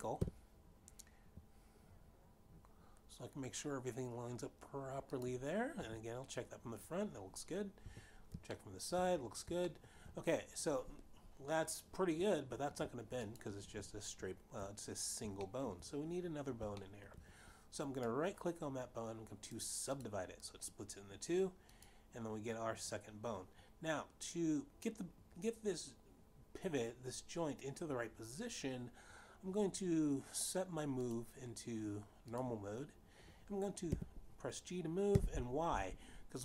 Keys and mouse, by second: 0.8 g, 5.5 click, 6.3 1, 8.1 3, 9.1 shift+middle click, 10.2 shift+middle click, 13.9 click, 16.0 shift+middle click, 17.4 shift+middle click, 18.3 right click, 20.1 click, 22.3 click, 31.5 click, 32.9 click, 35.5 y.